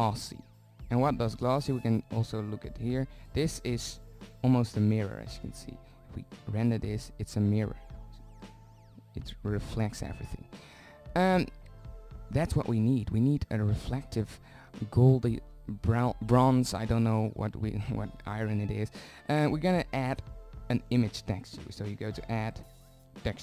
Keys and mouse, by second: 3.9 shift+z, 10.3 z, 13.4-14.6 middle drag, 14.6-16.6 drag, 16.6-19.9 middle drag, 19.9-22.0 drag.